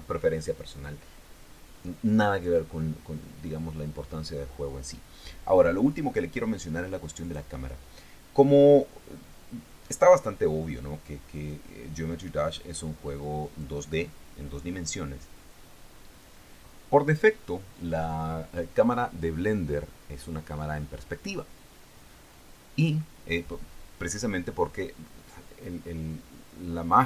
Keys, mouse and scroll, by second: 7.6 right click, 11.7 right click, 13.8 right click.